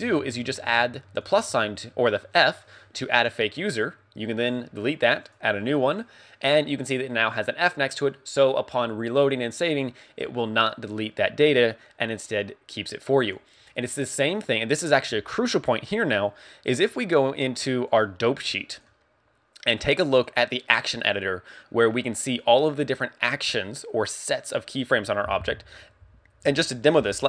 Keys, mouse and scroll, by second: 1.2 click, 4.4 click, 5.3 click, 6.4 click, 16.3 click, 17.7 click, 18.8 click.